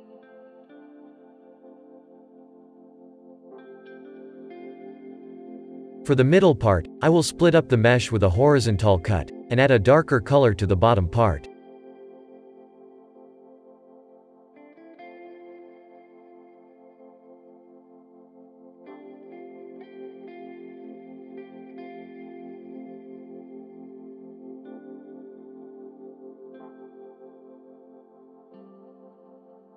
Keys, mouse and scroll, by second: 0.2 scroll up 2, 0.6 Tab, 1.2-3.6 middle drag, 3.6-6.1 scroll up 3, 11.0-11.5 scroll down 2, 11.5-15.5 shift+middle drag, 15.8-16.3 scroll up 3, 16.3-18.4 middle drag, 18.4 click, 18.8-19.1 scroll down 3, 19.1 shift+middle click, 21.8-25.9 drag, 25.9 Tab, 26.4 click, 26.6-27.1 scroll down 2, 27.1-29.7 shift+middle drag.